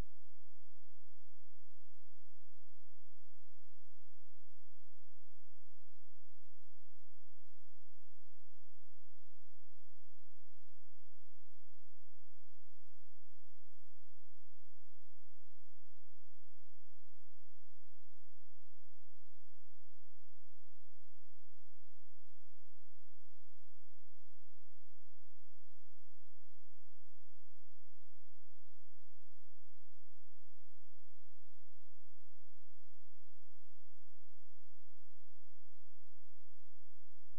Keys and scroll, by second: 6.7 space, 14.4 space, 28.8 space, 35.1 space.